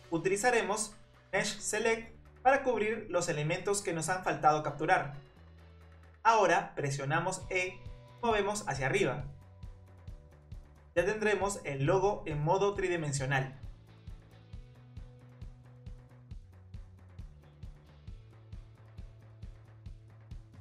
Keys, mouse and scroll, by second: 0.0-0.3 typing, 0.2 Tab, 0.5 Tab, 0.8 click, 1.5-2.5 scroll down 2, 2.5 click, 3.7 click, 5.6-6.4 scroll up 3, 6.4 e, 9.6-11.4 middle drag, 11.4-12.1 scroll down 3, 12.1-13.2 middle drag, 13.2 e, 14.0 click, 14.3 middle click, 15.0 Tab, 15.8 click, 16.2-17.1 scroll up 5, 17.1-17.4 scroll down 2, 17.4-19.5 middle drag.